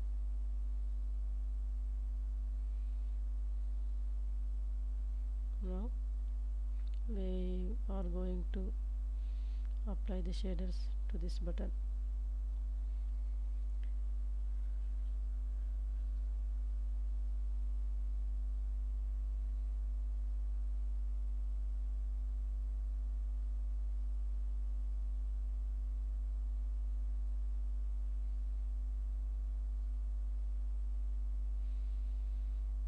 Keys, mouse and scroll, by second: 1.2 right click, 3.2 ctrl+z, 3.9 ctrl+s, 4.6-5.3 s, 5.4 g, 5.7 z, 7.0 shift+click, 7.8 click, 8.8 ctrl+s, 9.0 ctrl+s, 9.1-11.8 middle drag, 12.6 middle click, 14.2 middle click, 16.1 click, 16.9 s, 17.8 shift+z, 20.7 click, 21.4 g, 21.7 z, 23.5 shift+click, 26.6 ctrl+s, 26.9 ctrl+s, 27.6-28.7 middle drag, 29.5-30.7 middle drag, 31.6 ctrl+space.